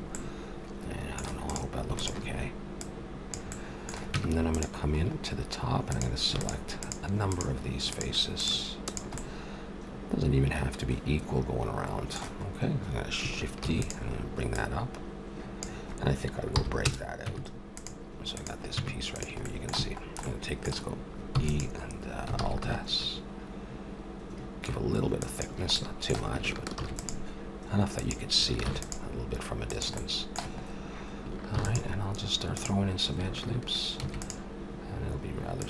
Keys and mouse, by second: 1.4-4.3 drag, 4.1 Tab, 5.9-10.6 drag, 9.2 middle click, 10.6 middle click, 13.6 shift+d, 14.5-16.3 drag, 16.5 p, 17.2 Tab, 18.3-20.1 drag, 18.7 Tab, 19.7 a, 21.3 e, 22.3 alt+s, 26.8 ctrl+r, 26.9-27.9 middle drag, 28.6 ctrl+r, 30.0-32.5 middle drag, 31.6 ctrl+r, 34.0 ctrl+r.